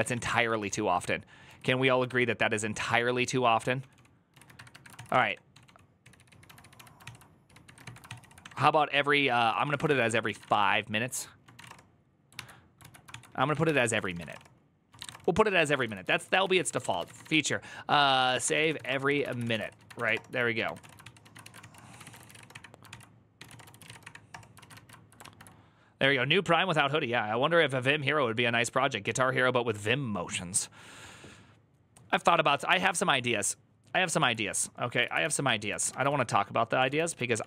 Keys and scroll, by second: 0.0-0.8 typing, 1.9 ctrl+c, 1.9-11.4 typing, 11.4 Return, 12.2 alt++, 12.6 alt+{, 12.9 ctrl+c, 13.0-25.5 typing, 21.4 ctrl+c, 22.7 ctrl+c, 34.1 alt+{, 34.8 ctrl+a, 35.0 2, 35.5 ctrl+a, 35.7 1, 35.9 ctrl+a, 35.9 ctrl+c, 36.6 ctrl+w, 36.7-37.4 typing, 37.1 ctrl+w, 37.2 ctrl+o, 37.3 ctrl+c.